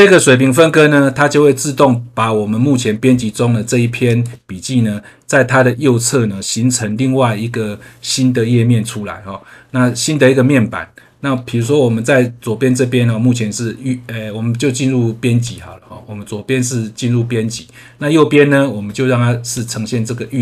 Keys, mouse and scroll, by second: 4.0 click, 15.4 click, 19.5 click.